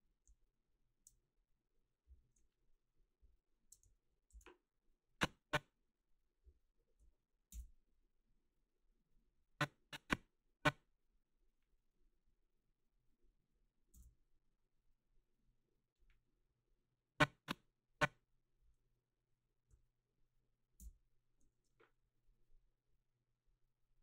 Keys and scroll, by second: 7.5 ctrl+v, 13.9 ctrl+v, 20.8 ctrl+v.